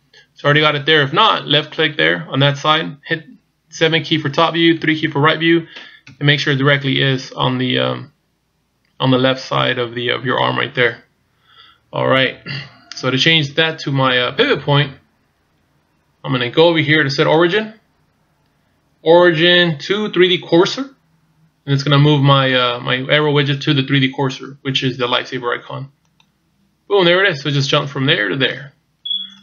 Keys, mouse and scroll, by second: 0.6-3.6 scroll up 2, 3.8 KP_7, 4.8 KP_3, 6.0 KP_1, 6.9-7.2 scroll down 2, 17.3 click.